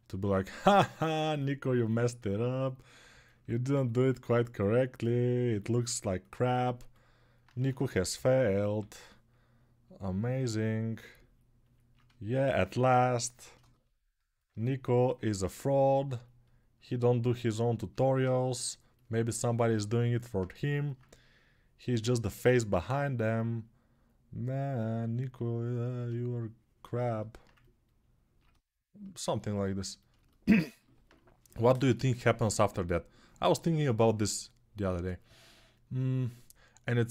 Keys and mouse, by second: 1.8 ctrl+alt+click, 2.4-16.1 alt+drag, 7.3 1, 7.9 [, 8.4 [, 8.6 [, 19.7-28.2 alt+drag, 30.4-37.1 ctrl+alt+drag.